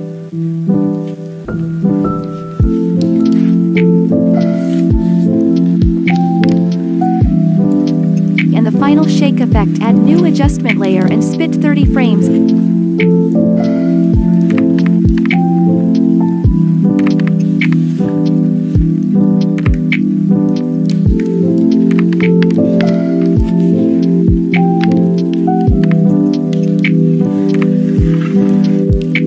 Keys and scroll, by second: 15.1 ctrl+shift+Left, 17.6 ctrl+shift+d, 19.5 Delete, 22.4 ctrl+shift+Right, 24.8 ctrl+shift+Right, 25.8 ctrl+shift+d, 27.5 Delete.